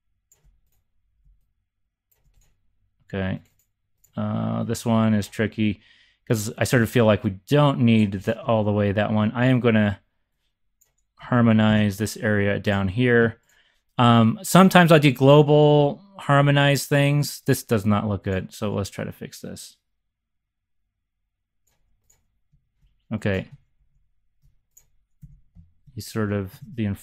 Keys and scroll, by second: 5.5 BackSpace, 11.6 shift+super+c, 15.3 z, 15.7 z, 17.5 BackSpace, 23.7 shift+super+c, 25.2-27.0 typing.